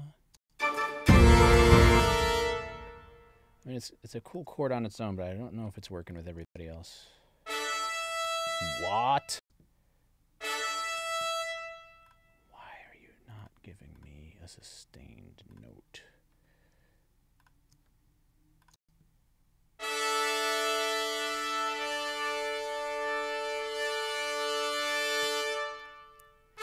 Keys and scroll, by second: 0.3 space, 6.4 space, 8.3 space, 11.0 space, 18.7 space, 25.0 space.